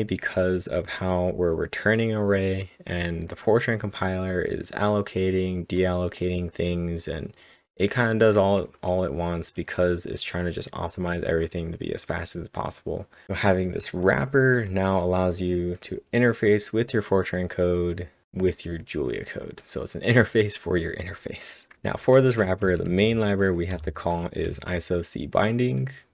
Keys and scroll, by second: 21.7-22.2 typing.